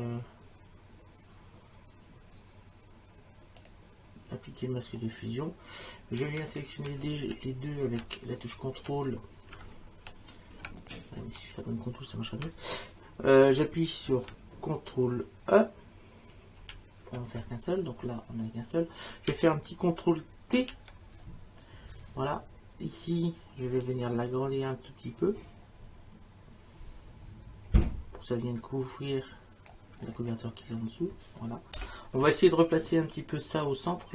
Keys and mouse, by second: 3.6 click, 6.2 F4, 6.5 click, 7.0 F5, 8.4 click, 10.8 click, 16.6 ctrl+e, 20.6 ctrl+t, 23.8 click, 31.8 Return.